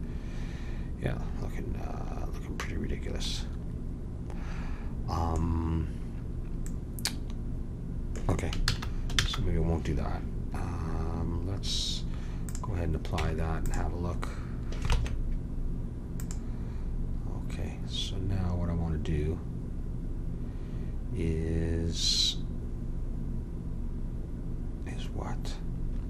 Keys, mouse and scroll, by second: 8.6 ctrl+z, 9.2 ctrl+z, 12.4 click, 13.1 Tab, 14.9 ctrl+Tab.